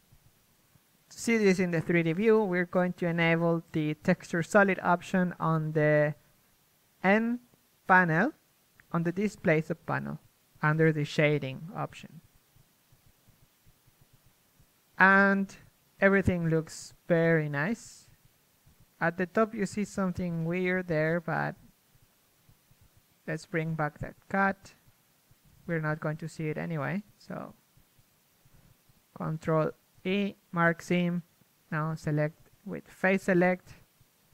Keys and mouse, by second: 0.5-2.4 middle drag, 2.4 click, 2.6 click, 4.3 n, 5.2-6.5 drag, 6.5 n, 6.9 n, 9.5 click, 11.1 z, 11.5 z, 11.8 a, 12.1 shift+space, 16.2 KP_1, 18.3 Tab, 20.4 Tab, 21.6 a, 22.5-23.5 drag, 23.5-25.9 right drag, 25.9 click, 25.9 z, 26.4 KP_7, 27.6 KP_1, 27.9 z, 30.1 ctrl+e, 31.2 a, 32.0 ctrl+Tab, 33.4 ctrl+Tab.